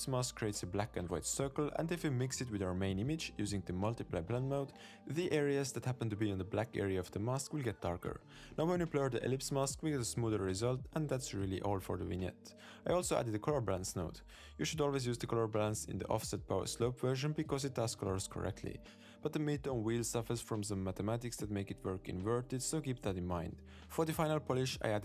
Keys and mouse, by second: 0.4 click, 0.6 click, 0.7 click, 0.9 click, 1.0 middle click, 1.4 click, 2.3-2.6 middle drag, 2.6 click, 3.8-4.3 drag, 4.8 middle click, 5.3 middle click, 5.7 click, 9.4 middle click, 10.2 click, 10.6-11.4 drag, 11.6 click, 12.1 click, 13.6 click, 13.9 click, 14.3 middle click, 14.4 shift+a, 15.7 middle click, 16.3 middle click, 16.9-17.7 drag, 19.3 middle click, 19.5 click, 20.0 click, 20.3 click, 20.4 click, 20.5 click, 20.6 click, 20.7 click, 20.8 click, 21.1 click, 21.2 click, 21.3 click, 21.4 click, 21.6 click, 21.7 click, 22.0 click, 22.1 click, 22.3 m, 22.5 m.